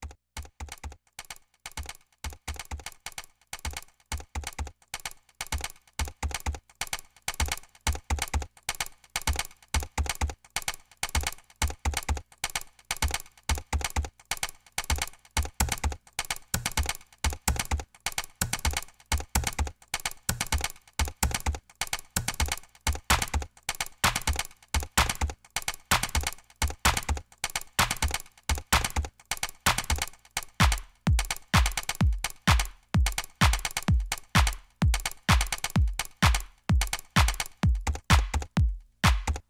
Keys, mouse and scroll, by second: 0.0 scroll up 2, 0.1 click, 0.2 right click, 0.3 click, 0.8 ctrl+l, 0.9 click, 1.1 scroll up 2, 1.2 right click, 3.0 scroll up 2, 3.1 click, 4.7 ctrl+z, 6.1 ctrl+w, 6.6 ctrl+w, 6.9 ctrl+w, 7.6 ctrl+w, 7.7 scroll down 2, 8.9 click, 10.0 ctrl+w, 10.1 middle click, 10.1 scroll up 2, 10.1 double click, 10.3 Return, 10.4 middle click, 10.4 scroll down 2, 10.5 click, 10.6 right click, 10.8 click, 12.0 ctrl+z, 12.2 click, 12.3 Delete, 12.5 alt+right click, 12.6 middle click, 13.1 middle click, 13.4 click, 14.1 scroll up 2, 14.2 right click, 14.6 right click, 15.1 click, 15.1 right click, 15.2 ctrl+w, 15.4 click, 15.4 right click, 15.5 ctrl+w, 15.9 click, 16.1 Return, 16.2 click, 16.3 right click, 16.3 click, 16.4 right click, 16.5 click, 16.9 F1, 17.0 scroll up 2, 17.1 right click, 17.2 click, 17.4-17.9 drag, 17.9 right click, 18.0 double click, 18.1 right click, 18.2 click, 18.2 Delete, 18.3 click, 18.6 right click, 18.7 click, 18.9 middle click, 18.9 right click, 19.0 ctrl+z, 19.1 click, 19.9 F5, 20.6-21.1 drag, 21.3 click, 21.6 scroll down 2, 21.7 click, 22.8 scroll down 2, 23.1 click, 23.2 right click, 23.4 click, 23.5 click, 24.1 click, 24.4 click, 24.5 right click, 25.8 scroll up 2, 26.0 click, 26.4 scroll up 2, 26.5 ctrl+click, 27.1 Delete, 27.2 ctrl+v, 27.2 click, 27.4 scroll down 2, 27.5 click, 27.7 click, 28.0 click, 29.7 middle click, 30.0 middle click, 30.4 middle click, 30.7 middle click, 30.9 ctrl+a, 30.9 Return, 32.5 ctrl+w, 32.6 click, 33.1 drag, 33.5 click, 33.5 right click, 34.1 right click, 34.3 click, 34.4 right click, 34.6 ctrl+z, 34.6 click, 35.4 right click, 35.4 click, 36.5 F1, 36.6 ctrl+z, 36.9 click, 37.0 F1, 37.0 click, 37.4 right click, 37.5 click, 38.1 right click, 38.3 right click, 38.4 ctrl+z, 38.5 click, 38.5 ctrl+right click, 38.7 click, 38.8 right drag, 39.1 right click, 39.4 right click.